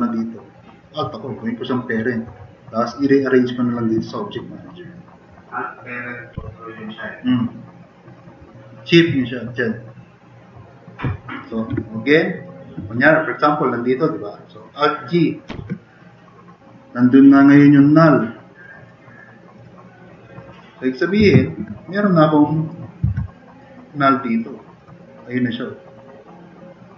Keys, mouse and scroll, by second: 6.3 Delete, 12.9-13.3 drag, 13.3-13.9 drag, 14.1 drag, 15.5 alt+g, 22.0-22.5 drag, 23.0 e, 23.1 drag.